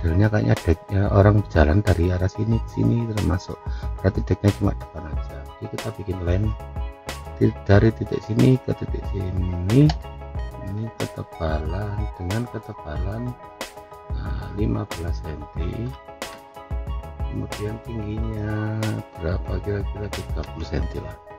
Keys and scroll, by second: 20.3 3, 20.6 Return.